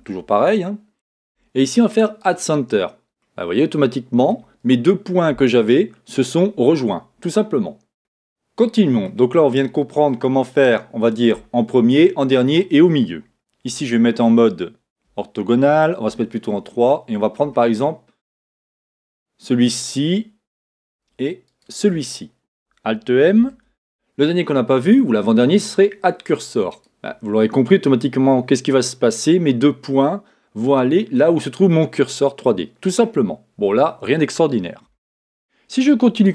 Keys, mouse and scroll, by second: 3.2 middle click, 7.0-18.9 middle drag, 13.6 KP_1, 15.0 KP_5, 16.0 KP_3, 18.9 click, 21.4 shift+click, 27.6 middle click, 31.7-36.3 middle drag, 34.8 KP_1.